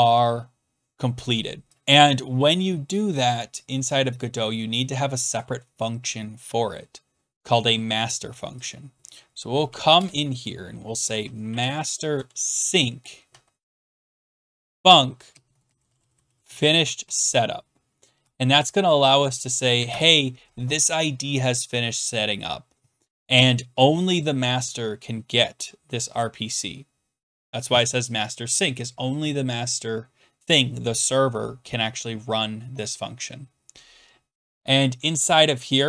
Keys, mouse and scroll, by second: 2.2 click, 8.7 click, 9.6 Return, 9.9-20.2 typing, 24.1 click, 24.2 click, 34.5 click, 34.8 click, 35.1-35.8 scroll down 3.